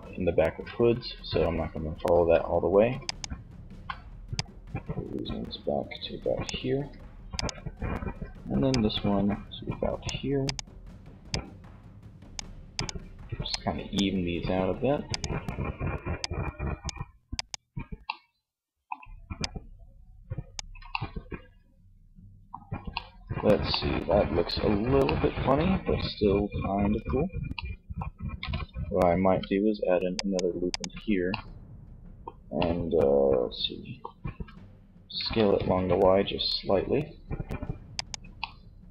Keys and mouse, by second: 20.2 middle click, 23.4 Tab, 26.1 Tab, 28.4 ctrl+r, 30.3-31.6 drag, 34.4 s, 37.1 click, 37.4-38.9 middle drag.